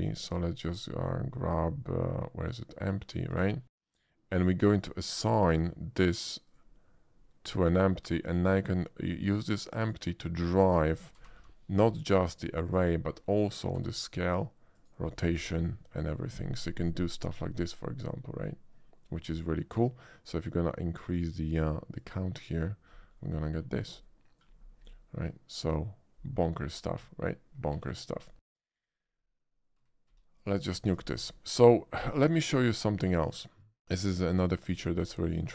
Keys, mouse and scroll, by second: 3.2 click, 5.4 click, 6.4 click, 7.6 click, 9.8 click, 11.2 g, 11.4 y, 11.8 x, 12.7 click, 13.8 s, 14.7 click, 15.4 r, 16.0 click, 16.5-19.2 middle drag, 21.1 click, 21.9 click, 23.1 middle click, 24.0-24.4 middle drag, 25.1-26.7 middle drag, 27.8 x, 27.9 click, 29.0-29.7 middle drag, 29.7 a, 30.0 x, 30.2 a, 30.4 click, 30.8 shift+middle click, 31.2 shift+a, 33.2 click, 34.1 middle click, 34.5 shift+middle drag, 35.2 shift+middle click.